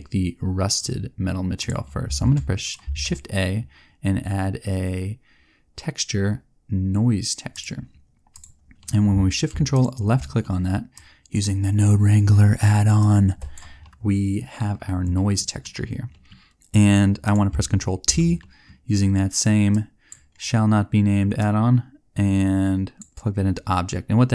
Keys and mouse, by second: 2.8 shift+a, 9.7-12.5 drag, 13.8-18.0 drag, 18.0 ctrl+t, 18.4 click, 19.6-21.2 drag.